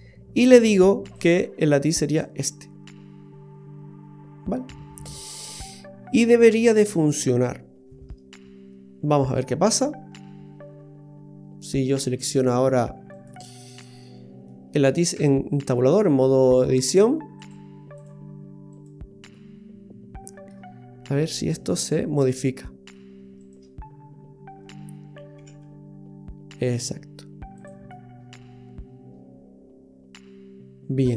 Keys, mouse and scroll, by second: 1.0 click, 6.9 click, 7.7-8.3 scroll up 2, 8.3 middle click, 13.1 right click, 13.7 right click, 14.5 middle click, 15.3 Tab, 15.7 middle click, 17.4 click, 18.8 right click, 19.4 middle click, 21.4 middle click, 23.4 shift+right click, 25.3 g, 27.9 middle click.